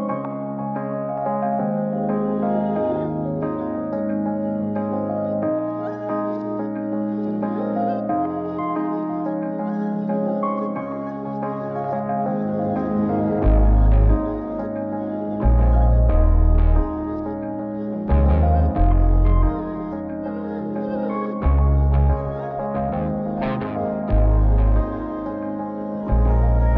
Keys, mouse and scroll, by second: 0.2 middle drag, 0.7 click, 1.7 scroll up 1, 3.8 ctrl+shift+click, 5.5 ctrl+shift+click, 6.3-6.7 scroll up 4, 6.9 middle click, 7.5 click, 10.0 ctrl+shift+click, 10.3 ctrl+shift+click, 10.5 ctrl+shift+click, 10.7 ctrl+shift+click, 11.0 ctrl+shift+click, 11.5 ctrl+shift+click, 12.6-14.9 middle drag, 15.2-15.9 scroll down 4, 15.6 middle click, 16.3 scroll up 2, 16.8 shift+a, 20.3 BackSpace, 23.6-24.4 drag, 25.2-26.0 drag, 26.4-26.7 drag.